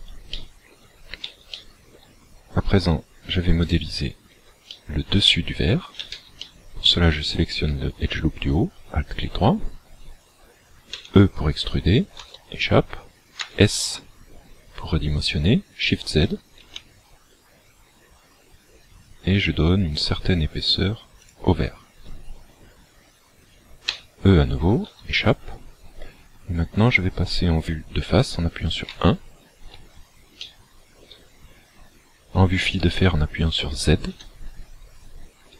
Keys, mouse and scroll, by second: 0.3 shift+middle click, 1.4 shift+middle click, 3.6 alt+right click, 4.7 shift+middle click, 5.6 scroll up 2, 6.4 shift+middle click, 10.9 e, 13.3 s, 21.3 shift+click, 23.9 e, 28.8 KP_1, 30.4 shift+middle click, 34.1 z, 35.1 scroll up 2.